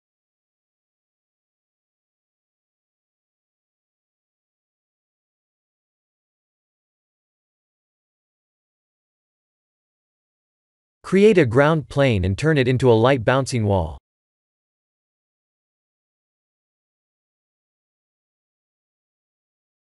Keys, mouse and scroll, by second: 1.1 click, 1.7-2.2 scroll down 2, 2.1 middle click, 3.3 b, 5.3 KP_3, 5.9 click, 8.8 click, 9.1 middle click, 11.5 shift+a, 15.6 s, 18.1 middle click, 19.0-19.5 scroll down 3, 19.3 middle click.